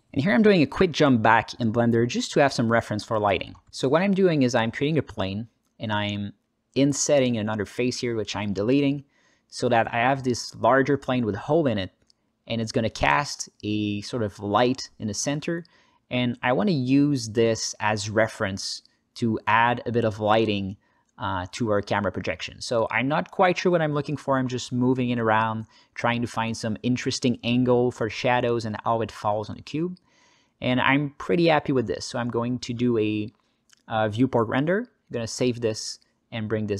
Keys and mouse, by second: 0.6 shift+a, 0.9 s, 1.1-3.5 drag, 1.6 g, 1.6 shift+z, 3.5 Tab, 3.5 shift+d, 4.0-8.3 drag, 8.3 Delete, 8.3 s, 8.5 Tab, 8.9 s, 9.3 space, 12.3 g, 12.3 shift+z, 15.8-17.2 drag, 15.8 s, 15.8 g, 17.2 r, 19.9 Tab, 19.9-22.5 drag, 19.9 2, 19.9 1, 22.5 KP_0, 23.0 g, 24.2 click, 24.2 shift+z, 24.8 s, 24.9 g, 33.3 g.